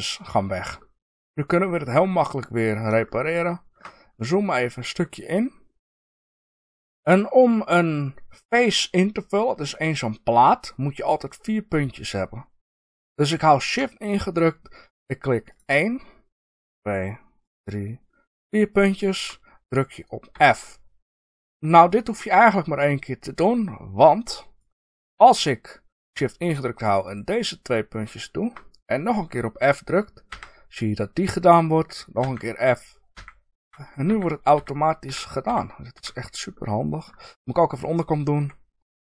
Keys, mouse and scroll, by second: 0.7-15.4 shift+middle drag, 4.0-5.0 scroll up 2, 6.1-8.1 scroll up 1, 15.4 shift+click, 16.5 shift+click, 17.4 shift+click, 18.3 shift+click, 20.3 f, 24.5 click, 27.0 shift+click, 27.9 shift+click, 29.3-39.1 middle drag, 30.2 f, 37.2-38.3 scroll down 2, 38.3 KP_1.